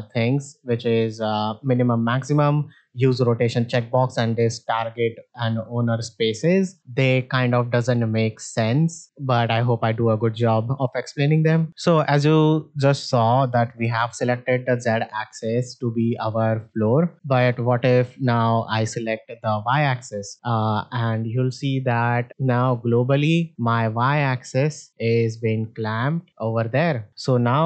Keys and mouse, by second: 0.5 click, 9.5 middle drag, 9.8 shift+middle drag, 10.5 middle drag, 16.2 middle drag, 17.1 middle click, 19.5 click, 21.9 middle drag, 22.4-23.6 drag, 24.3-27.1 drag, 27.4 middle drag.